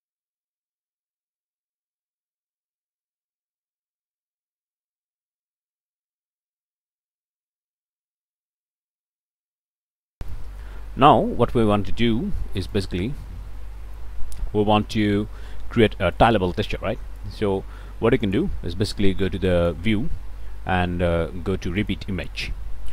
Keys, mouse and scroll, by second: 0.1 click, 0.9 ctrl+z, 1.3 ctrl+z, 1.8 right click, 2.3 click, 8.8-10.1 right drag, 10.3-12.9 shift+right drag, 13.1-16.4 shift+right drag, 17.2-18.5 drag, 19.5 click, 21.8 click.